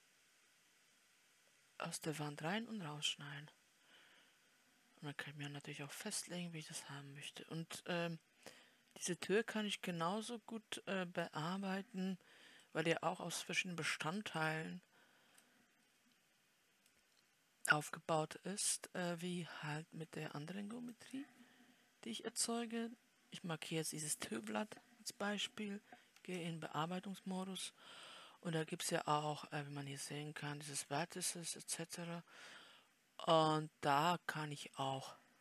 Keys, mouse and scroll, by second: 12.0-12.4 scroll down 8, 13.1-14.8 middle drag, 14.8 scroll up 1, 14.9 click, 15.4 scroll up 3, 20.6 scroll up 1, 21.2-32.6 drag, 32.6 scroll up 3.